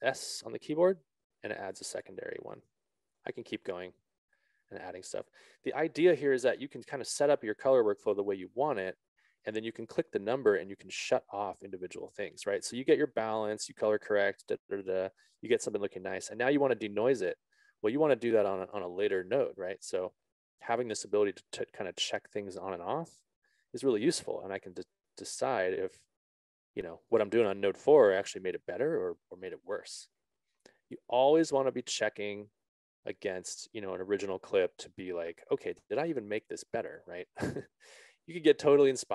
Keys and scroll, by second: 0.8 alt+s.